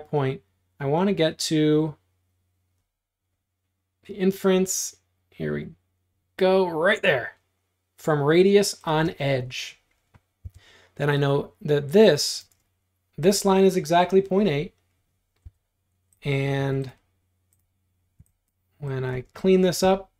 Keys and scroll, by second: 9.1 space, 10.5 l, 12.5 space, 15.5 l, 16.6 Escape, 18.3 e, 19.2 space.